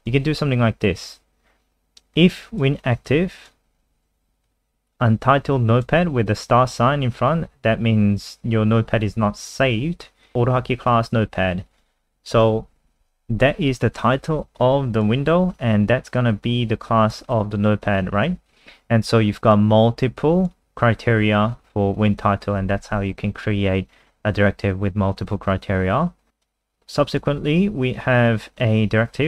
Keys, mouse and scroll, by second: 0.0 click.